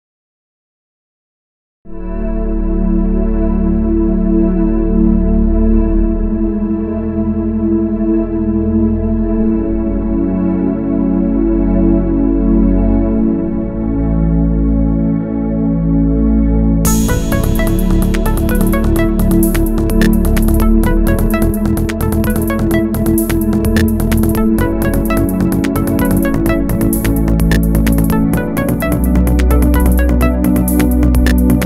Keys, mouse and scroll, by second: 3.3 click, 3.7 g, 4.5 click, 4.9 scroll down 1, 5.0-8.5 middle drag, 5.7 Tab, 7.6 KP_3, 7.9 scroll up 2, 8.0 Tab, 8.2-8.5 scroll down 2, 8.5 3, 9.0 a, 9.7 shift+d, 10.9 2, 11.0 click, 11.3 click, 11.4 g, 12.3 ctrl+click, 12.4 scroll down 1, 12.7 scroll up 1, 12.8 Tab, 13.4 shift+d, 14.3 Escape, 14.7 ctrl+z, 15.1-21.5 drag, 18.1 KP_Enter, 19.1 KP_Enter, 20.7 KP_Enter, 21.5-22.6 middle drag, 21.9-22.6 scroll down 2, 22.6 click, 22.7-27.9 drag, 24.1-24.9 scroll down 2, 24.9 scroll down 1, 27.0 KP_Enter, 27.5 KP_3, 27.7 scroll up 2, 27.9 shift+middle click, 28.5-31.6 shift+drag, 30.5-31.1 scroll down 1.